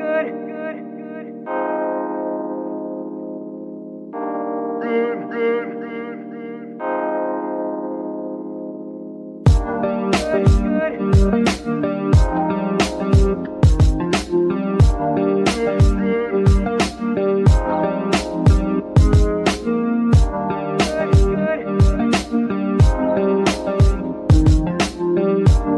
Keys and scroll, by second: 1.9 shift+g, 2.3 shift+Escape, 7.1 g, 7.6 Escape, 23.6 g, 23.9 Escape.